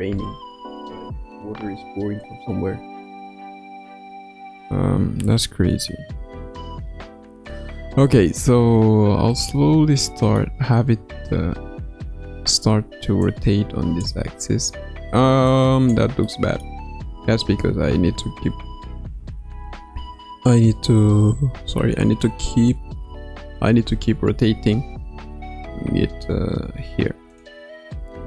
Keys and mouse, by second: 9.3-10.4 middle drag, 10.8 a, 12.1 i, 13.2-14.5 drag, 14.0 space, 14.5 space, 15.4 click, 16.3 middle click, 18.2 KP_9, 20.0 KP_1, 21.2 KP_3, 23.0 KP_9, 25.2 r.